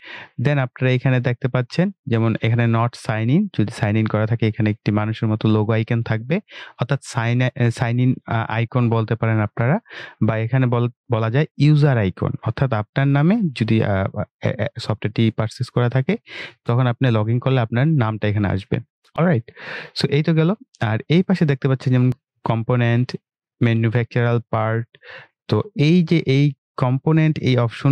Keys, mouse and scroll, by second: 0.0 click.